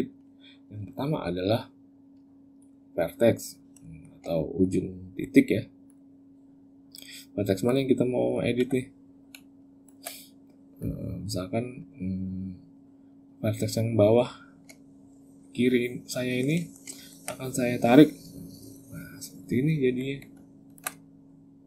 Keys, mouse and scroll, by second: 2.3 click, 3.6 shift+middle click, 4.1 middle click, 4.9 middle click, 5.7 click, 6.7 click, 7.5 click, 8.1 click, 8.3 z, 9.1 z, 10.6 click, 11.6 click, 13.9 shift+click, 14.8 middle click, 16.4 shift+middle click, 16.8 ctrl+middle click, 17.6 click, 19.6 Tab, 20.1 z.